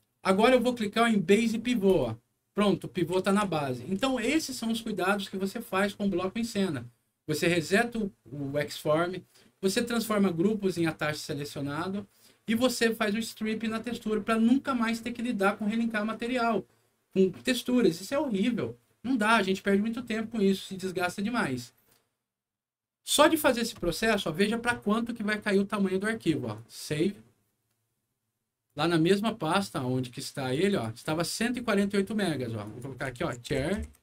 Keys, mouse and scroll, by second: 1.8 click, 2.6 middle click, 3.0 w, 3.6 alt+middle click, 25.2 click, 26.5 click, 28.6 click, 30.5 click, 30.7 click, 32.6 click, 32.9-34.0 typing.